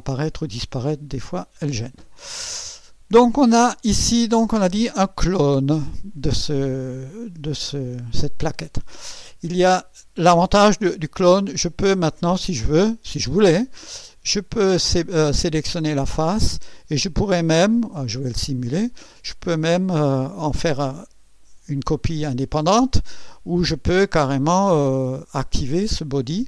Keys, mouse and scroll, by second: 0.5 right click, 11.6 click, 12.7 click, 14.2 click, 15.2 click, 16.4 click, 18.7 click, 23.1 click, 24.0 click.